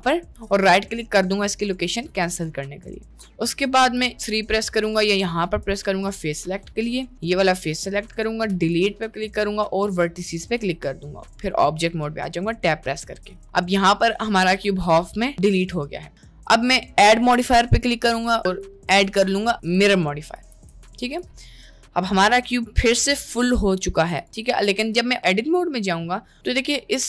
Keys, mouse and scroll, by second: 2.6 middle click, 3.9 click, 6.1 middle click, 7.9 middle click, 8.6 Delete, 10.6 Tab, 12.2 middle click, 14.3-15.7 middle drag, 16.1-21.3 drag, 21.7 middle click, 22.5 middle click, 24.1 click, 24.5 Tab, 25.0 Tab, 26.3 middle click, 26.9 click.